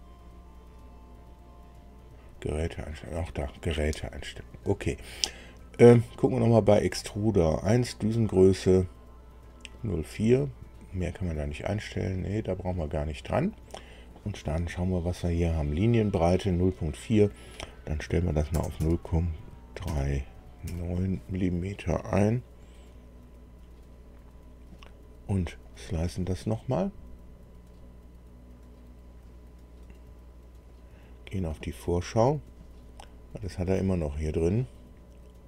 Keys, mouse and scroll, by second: 2.1 click, 6.0 click, 11.0 click, 12.8 click, 16.6 click, 18.4 KP_0, 18.8 KP_Decimal, 19.8 KP_3, 20.6 KP_9, 25.6 click, 30.6 click.